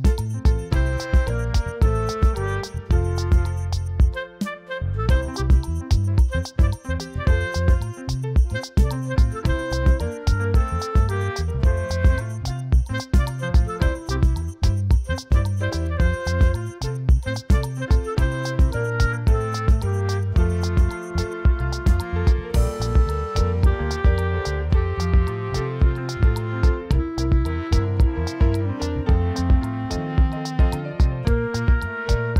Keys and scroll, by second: 1.7 [, 2.8-7.6 typing, 9.2-10.9 typing, 10.6 ctrl+alt+z, 12.0 space, 12.9 space, 14.1 space, 14.5 space, 16.1 space, 16.6 space, 16.9 space, 17.2 space, 19.7 6, 20.2 space, 20.7 space, 23.6 space, 26.6 space, 26.9 space, 27.5 3, 29.8 ctrl+space, 30.4 space, 30.9 5.